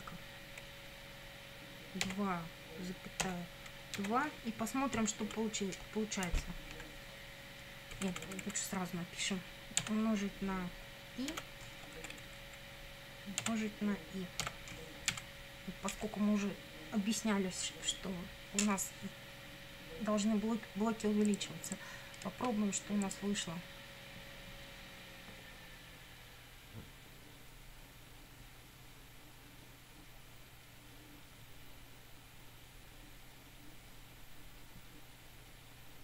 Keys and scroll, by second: 2.1 2, 3.3 ,, 4.0 2, 5.0 Down, 6.2 Up, 7.9 Left, 9.8 *, 11.3 i, 12.0 Right, 13.4 *, 14.4 i, 15.1 Down.